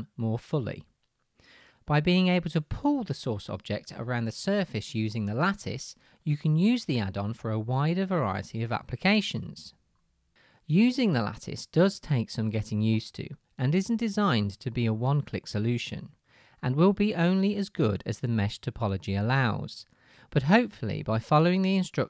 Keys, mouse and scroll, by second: 19.7 s, 19.9 middle click, 20.5-22.0 drag, 21.8 g.